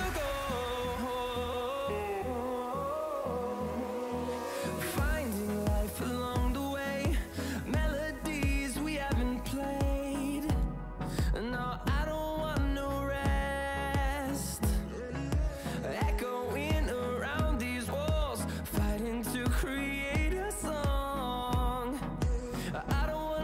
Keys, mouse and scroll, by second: 4.0-6.2 drag, 16.3-23.4 drag.